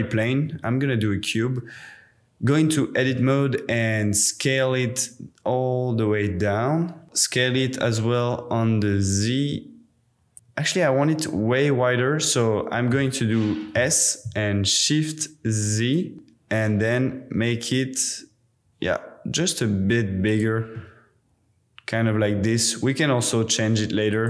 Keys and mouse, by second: 0.3 Tab, 3.1 s, 7.0 s, 7.0 z, 10.3-12.9 middle drag, 13.7 s, 15.2 shift+click, 16.1 shift+z, 20.3 click, 20.8-22.3 middle drag, 22.4 Tab, 24.1 click.